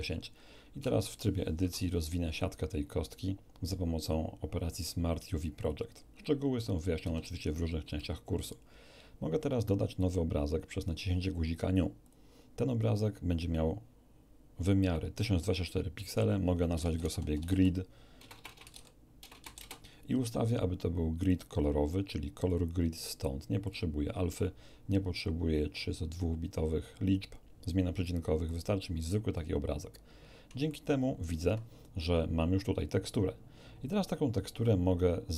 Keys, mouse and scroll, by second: 0.2-0.5 scroll up 1, 0.8 Tab, 1.6 u, 2.3 click, 5.6 click, 7.0 a, 7.3-7.7 scroll down 1, 7.9-8.7 shift+middle drag, 12.0 click, 16.0 click, 16.7-19.3 typing, 19.5 Return, 21.2 click, 22.5 click, 23.6 click, 28.5 click, 29.3-29.9 scroll down 1, 30.7-31.4 shift+middle drag.